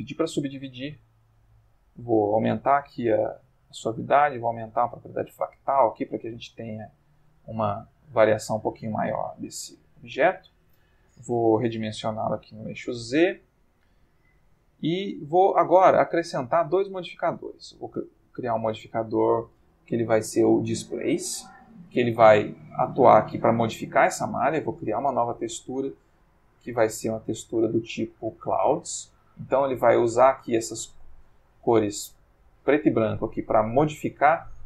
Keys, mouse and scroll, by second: 1.9-3.8 drag, 4.1-7.4 drag, 7.5-9.7 middle drag, 9.6 Tab, 9.9 middle click, 10.6 Tab, 11.5 s, 11.7 z, 12.8-15.1 drag, 12.9-15.1 middle drag, 15.2 Tab, 16.9 click, 17.5 click, 20.9 click, 22.8-23.4 middle drag, 24.8 click, 26.4 click, 27.4 click, 28.3 click, 30.3-34.3 drag.